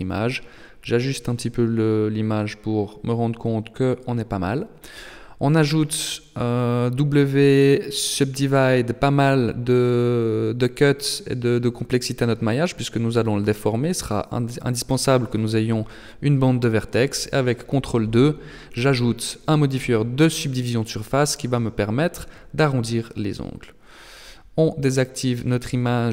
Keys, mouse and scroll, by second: 4.4 w, 7.0 click, 7.5 click, 8.3 click, 8.8 click, 9.6 click, 15.0 ctrl+2, 16.2 Tab, 17.6 z, 20.2 Tab, 22.4 click, 23.0 click, 23.5 Tab, 24.2 middle click.